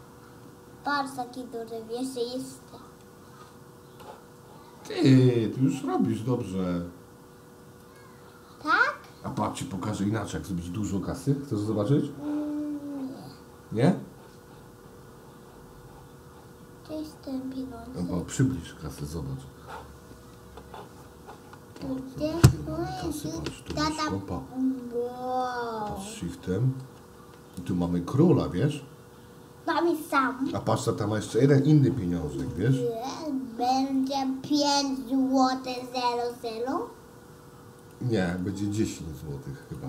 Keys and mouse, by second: 3.2 shift+d, 10.4 shift+d, 20.6 shift+x, 21.5 d, 21.8 d, 22.0-22.9 d, 23.5-25.4 middle drag, 26.5 shift+middle click, 27.6-27.9 shift+middle drag, 32.5 click, 33.7 x, 34.7 click, 35.2 x, 36.7 x, 39.2 x.